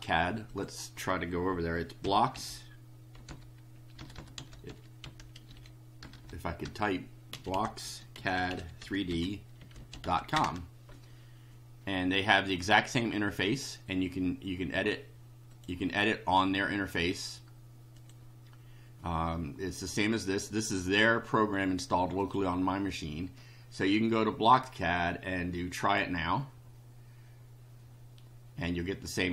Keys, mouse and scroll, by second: 0.5 click, 2.0-6.0 typing, 7.3-10.5 typing, 15.5 click, 17.9 click, 22.2 click, 25.7 click.